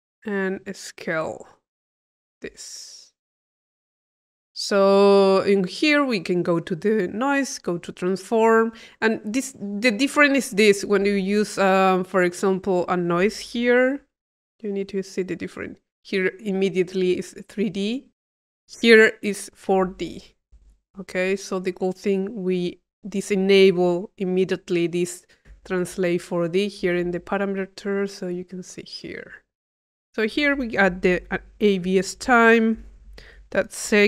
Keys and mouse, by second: 0.6-4.8 middle drag, 5.3-6.5 drag, 7.3 click, 9.5 click, 10.9-12.0 drag, 11.1 Tab, 12.9 click, 13.9 i, 14.8 click, 18.4 click, 20.2 click, 20.7 Delete, 20.7 click, 21.6 click, 22.3-23.7 drag, 29.7 click.